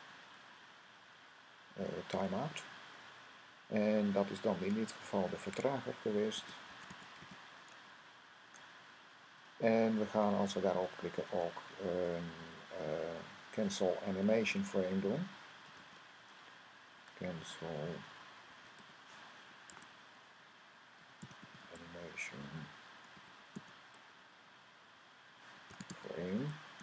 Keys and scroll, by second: 1.7 Down, 6.0-7.6 typing, 9.0 Right, 11.2-11.9 typing, 14.0-17.1 typing, 18.3-19.5 typing, 20.7-24.0 typing, 25.3-26.8 typing.